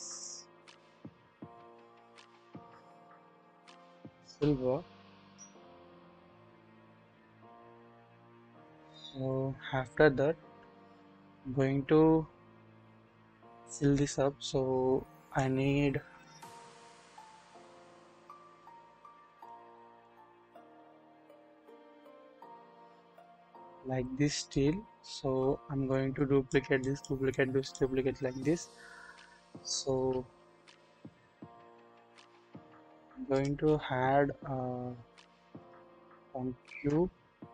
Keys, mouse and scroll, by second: 0.2-9.0 drag, 9.7-10.8 scroll up 1, 11.0-11.9 scroll down 1, 12.5 scroll up 1, 14.4-15.4 drag, 16.0 KP_1, 17.3 click, 19.1-19.4 scroll up 1, 19.4 click, 20.0-24.5 drag, 26.1 click, 26.8 click, 27.3 double click, 30.1 ctrl+z, 30.3 ctrl+z, 31.3 ctrl+z, 32.3 scroll down 1, 33.9 scroll down 1, 33.9 scroll up 1, 35.1-35.8 scroll down 1, 36.6 shift+a.